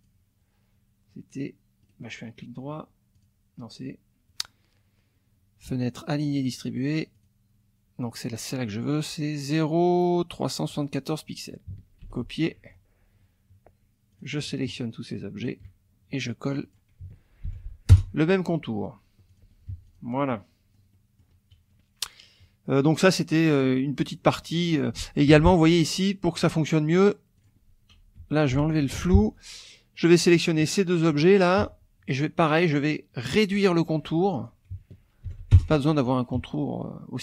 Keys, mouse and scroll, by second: 0.0 click, 1.8 click, 3.1 click, 7.1 click, 10.6 click, 12.0 ctrl+c, 12.2 ctrl+click, 14.1 click, 14.5 shift+click, 15.4 shift+click, 16.5 click, 17.4 ctrl+v, 17.9 ctrl+Return, 19.3 click, 19.7 F1, 19.8 click, 20.3-21.4 drag, 22.4 KP_Subtract, 24.5 click, 24.9 click, 25.3 F2, 26.2 click, 27.4 click, 28.2 F1, 28.5 Delete, 29.0 F2, 30.0 click, 30.9 shift+click, 31.6 shift+F1, 34.3 click, 35.2 ctrl+v, 35.5 ctrl+Return, 36.3 F1.